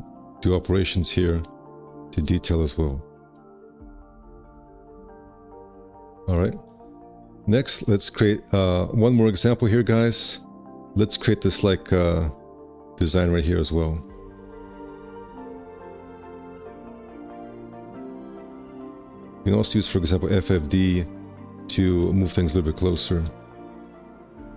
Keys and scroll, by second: 0.3 ctrl+b, 2.9 alt+s, 4.4 space, 5.0 2, 5.2 q, 15.1 F4, 21.2 1, 21.9 w, 22.9 space.